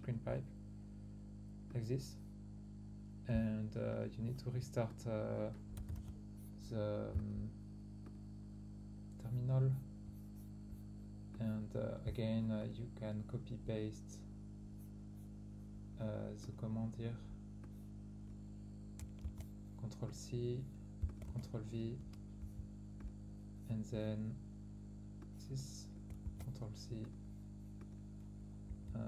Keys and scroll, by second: 3.6-4.0 typing, 5.1 typing, 19.2 ctrl+c, 21.2 ctrl+v, 26.2 ctrl+c, 28.6 Up.